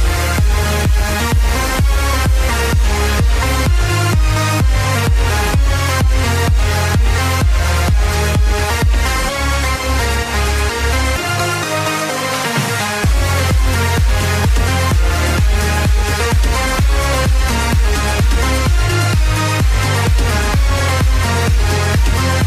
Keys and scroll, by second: 1.4 space.